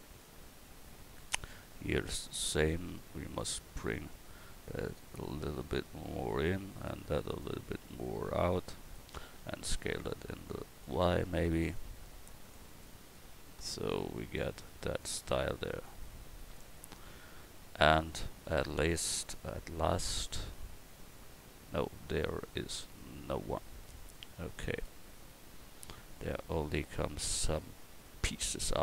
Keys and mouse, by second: 4.7-6.3 drag, 6.7 right click, 9.4 s, 11.8-18.1 drag, 13.3 a.